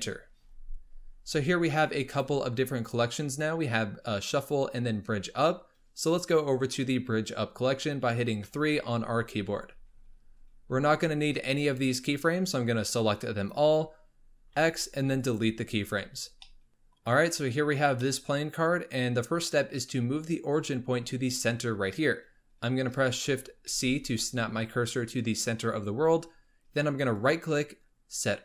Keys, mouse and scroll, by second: 2.1 click, 2.8 click, 8.4 3, 12.5-14.3 drag, 14.3 x, 16.4-21.1 middle drag, 23.7 shift+c, 25.7-26.6 scroll up 3, 27.2-28.4 right drag.